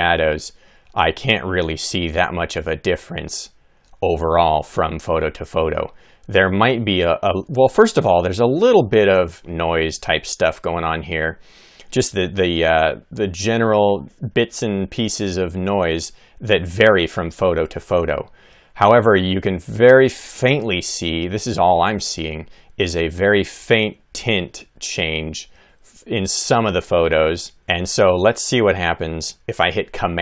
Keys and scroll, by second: 0.7 Left, 1.1 Right, 1.8 Left, 6.0 Right, 16.9 Left, 17.5 Right, 18.1 Left, 19.2 Right, 23.3 Right, 23.9 Left, 27.1 Right, 30.1 super+=.